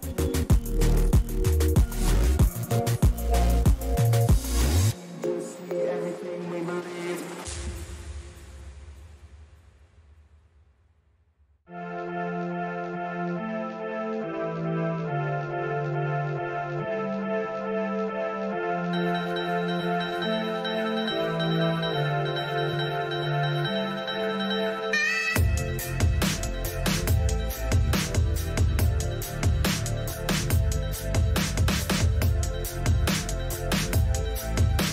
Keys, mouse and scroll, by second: 2.9-5.2 right drag, 5.2-7.2 drag, 8.7-18.0 middle drag, 18.0-22.1 drag, 22.7-25.1 middle drag, 26.2 a, 27.4-29.3 right drag, 29.0 middle click, 29.3-31.4 drag, 31.9 a, 32.3-34.3 right drag, 33.4-34.9 drag.